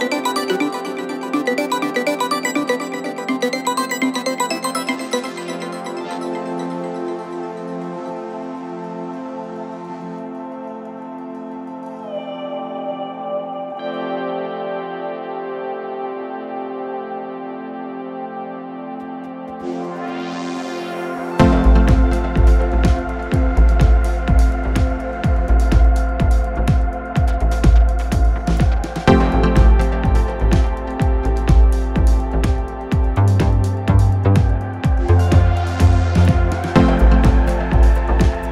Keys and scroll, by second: 8.7 ], 13.1 ], 15.2 ], 29.1 ], 29.5 ], 36.4 [.